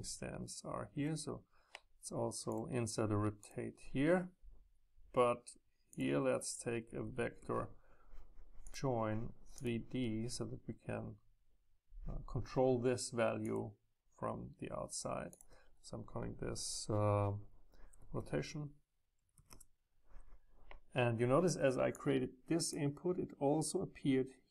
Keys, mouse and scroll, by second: 2.5-5.5 drag, 6.0-7.9 drag, 8.7-11.6 drag, 13.5-17.3 drag, 19.4 Return, 22.0-24.5 drag.